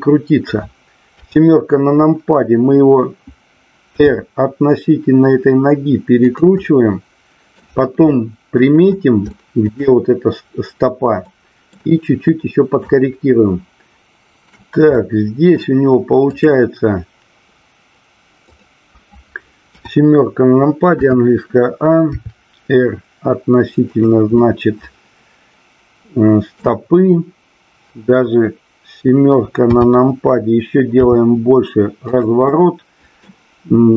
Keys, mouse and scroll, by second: 1.2 KP_7, 3.8 r, 6.3 click, 6.6 middle click, 8.1 middle click, 9.2 shift+middle click, 11.2-11.8 middle drag, 12.0 middle click, 14.0 shift+middle click, 14.9 middle click, 16.2 click, 18.5 click, 19.6 KP_7, 20.9 a, 22.2 r, 24.3-26.7 middle drag, 29.6 KP_7, 31.1 r, 32.1 click, 32.4 middle click.